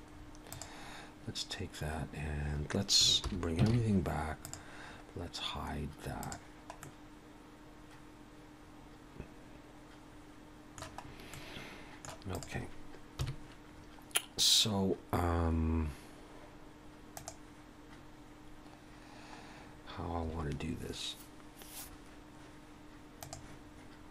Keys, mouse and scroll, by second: 0.2 scroll down 2, 0.5 click, 3.3 alt+h, 3.7 alt+a, 4.4 click, 6.2 click, 6.8 middle click, 11.0 scroll up 1, 11.3 middle click, 12.3 click, 13.2 KP_1.